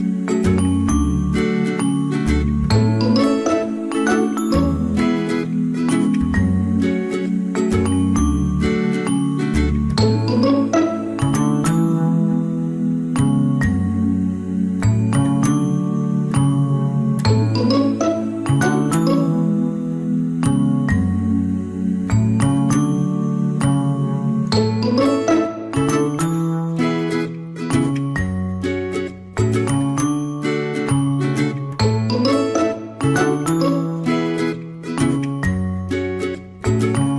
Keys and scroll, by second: 4.1 ctrl+c, 4.9 ctrl+f, 36.5 Delete.